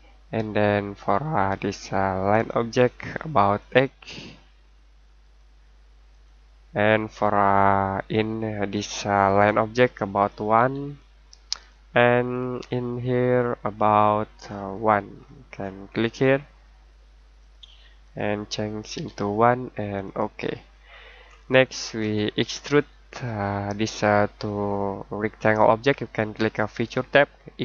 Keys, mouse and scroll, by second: 2.3 click, 5.2 8, 6.1 click, 7.3-8.7 scroll down 1, 8.7 click, 10.5 1, 11.5 click, 14.4 scroll up 1, 14.7-16.7 scroll down 1, 17.4 click, 18.9 1, 20.0 click, 20.6 scroll down 1, 20.8-21.7 scroll up 1, 22.5-24.6 scroll down 1.